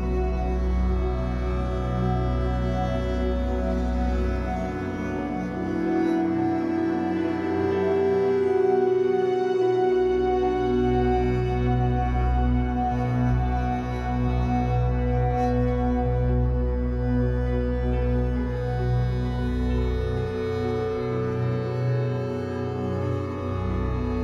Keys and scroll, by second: 1.7 F8, 3.3 a.